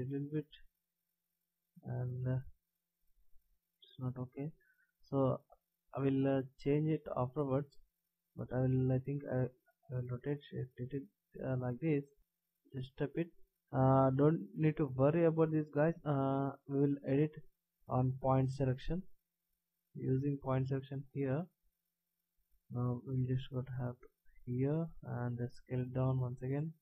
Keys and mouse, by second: 1.1-2.8 drag, 3.8 ctrl+z, 8.7 r, 12.0 click, 19.4 middle click, 23.2 e, 25.4 s.